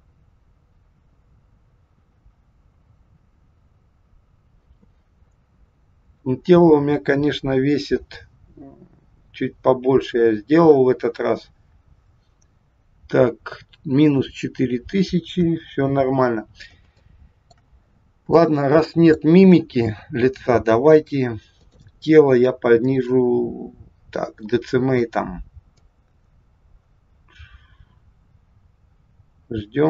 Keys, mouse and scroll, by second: 15.3 KP_1, 16.3-16.7 scroll down 2, 17.0 shift+middle click, 17.8-18.3 scroll up 4, 18.5 shift+middle click, 21.6 click, 22.9 click, 25.7 click.